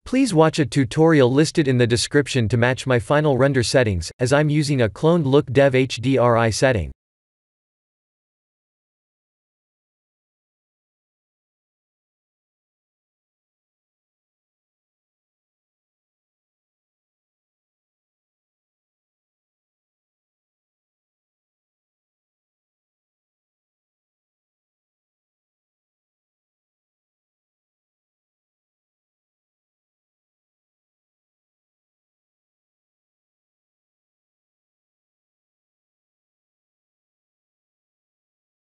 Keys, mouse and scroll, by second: 1.2 KP_3, 2.1-3.4 scroll up 5, 3.4 click, 5.0 KP_1, 6.0 scroll down 4, 7.1 click, 10.4 s, 11.7 middle click, 13.4-14.7 scroll up 1, 15.1 middle click, 15.9 scroll down 3, 17.0 Tab, 17.2 2, 17.5 click, 18.1 e, 19.9 KP_3, 20.5 KP_1, 21.0 KP_3, 21.7-22.7 scroll down 7, 22.8 shift+middle click, 23.9 e, 26.5 e, 28.1 middle click, 28.9 click, 29.6 shift+click, 31.5 ctrl+b, 33.5 Tab, 33.9 middle click, 34.6 KP_0, 36.7 KP_0.